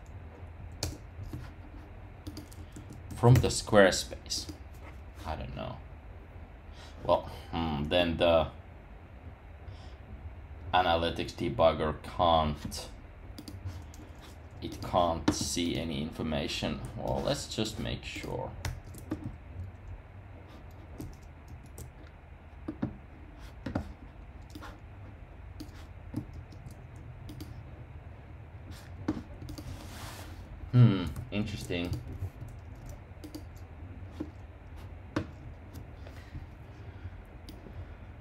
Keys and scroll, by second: 0.5 Down, 0.8 Return, 2.7 super+a, 3.0 super+c, 18.6 super+r, 21.4 shift+super+r, 26.3 super+r.